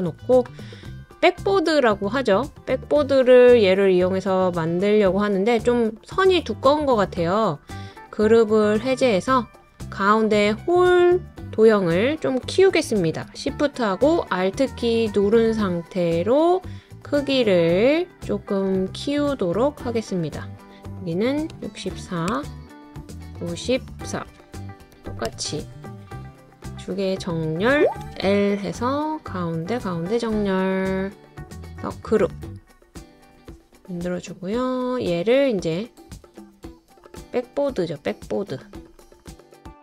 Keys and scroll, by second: 21.3-22.3 typing, 24.3-25.3 typing, 28.0 typing.